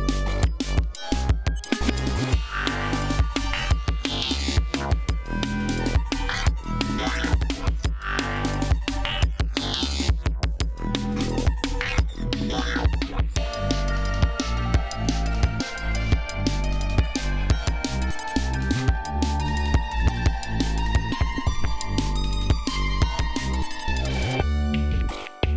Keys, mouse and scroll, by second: 14.5-15.3 scroll down 2, 15.6 ctrl+scroll up 2, 16.2-16.6 ctrl+scroll down 3, 18.2 scroll up 2, 19.8-20.8 scroll up 6, 21.4 scroll up 2, 22.6-23.0 scroll up 2, 23.1-23.8 scroll down 4.